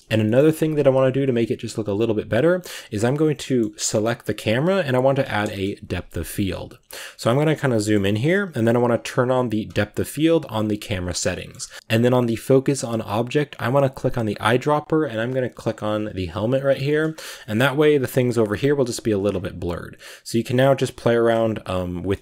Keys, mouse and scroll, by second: 0.0-2.2 middle drag, 2.2-3.3 right drag, 3.3 middle click, 3.5 scroll up 2, 5.3 KP_0, 6.1 shift+middle click, 6.7-7.6 scroll up 11, 7.1 shift+middle click, 7.6-9.5 shift+middle drag, 9.5-15.4 drag, 16.0 z, 16.4-18.5 scroll down 12, 16.7 shift+middle click, 17.2 shift+middle drag, 19.2-22.0 shift+drag, 22.0 shift+middle click.